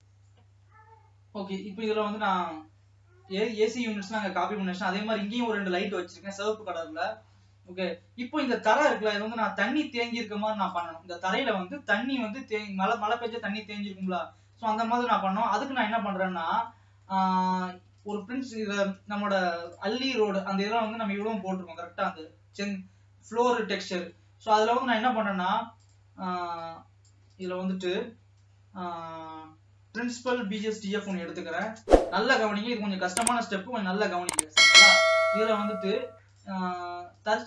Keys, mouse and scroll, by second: 0.0 ctrl+s, 9.3 click, 33.1-34.2 drag, 34.2 middle click, 34.8-35.2 scroll up 2.